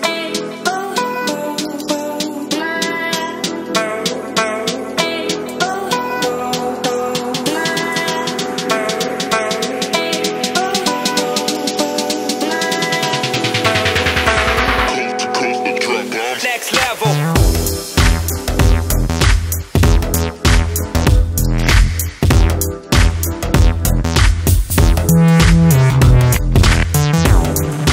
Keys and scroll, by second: 3.2 ctrl+space, 3.7 ctrl+space, 3.8 ctrl+space, 10.2 ctrl+j, 15.7 ctrl+space.